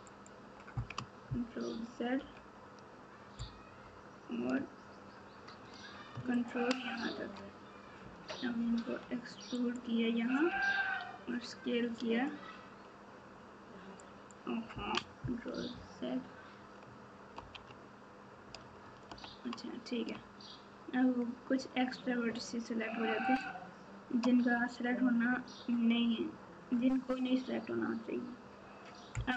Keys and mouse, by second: 1.6 ctrl+z, 6.3 ctrl+click, 8.6 e, 10.4 s, 15.7 ctrl+z, 19.0 ctrl+z, 23.2 shift+click.